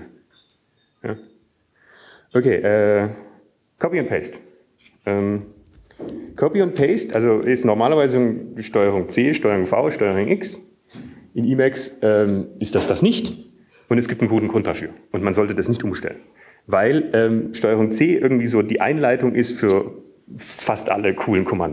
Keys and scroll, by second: 8.6 Down, 9.5 Down, 9.7 Left, 9.7 Up, 11.2 Down.